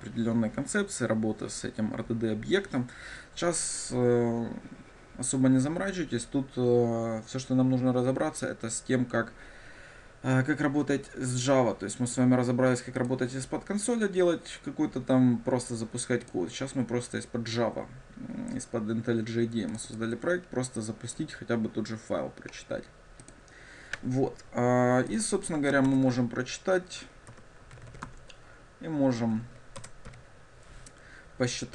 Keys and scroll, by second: 26.0 shift+Return, 28.2 Tab, 29.9 Return.